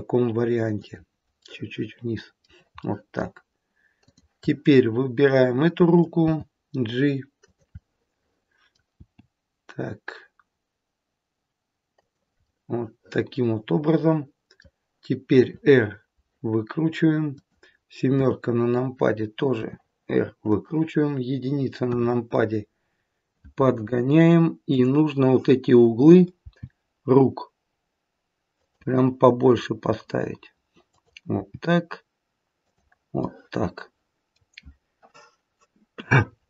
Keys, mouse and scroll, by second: 1.3 middle click, 2.8 middle click, 3.9 click, 4.7 middle click, 6.1 g, 7.7 middle click, 8.9 g, 12.4 middle click, 15.4 r, 18.1 KP_7, 19.5 r, 21.8 KP_1, 24.6 click, 26.3 g, 30.9 click, 31.6 g, 33.2 middle click.